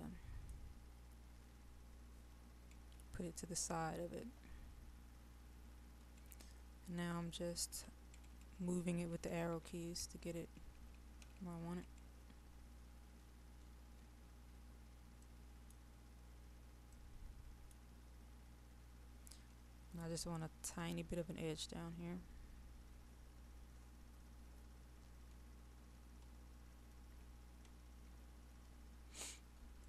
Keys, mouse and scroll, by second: 0.7-2.4 scroll up 1, 3.4 shift+Left, 12.8-13.2 scroll up 1, 13.2-14.5 scroll down 1, 14.5-15.3 scroll up 1, 15.3 middle click, 16.3-16.9 scroll down 1, 16.9 middle click, 18.3-18.7 scroll down 1, 18.7-26.2 scroll up 1, 27.1 shift+Down, 28.1 shift+Up.